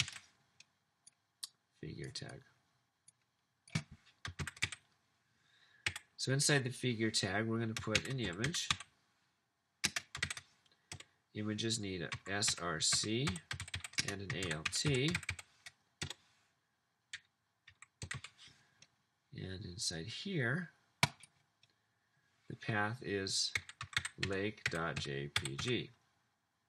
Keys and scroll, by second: 0.0-0.5 typing, 4.5 typing, 5.6 typing, 5.8 Up, 6.8-10.8 typing, 11.9-16.0 typing, 16.0 Left, 17.4-18.6 typing, 23.5-26.0 typing.